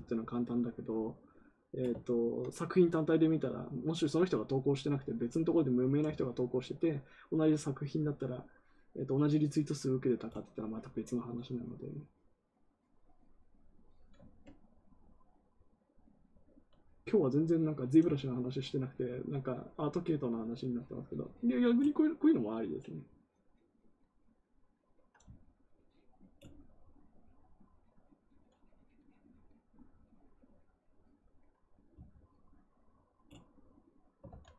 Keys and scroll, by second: 34.2 ctrl+z.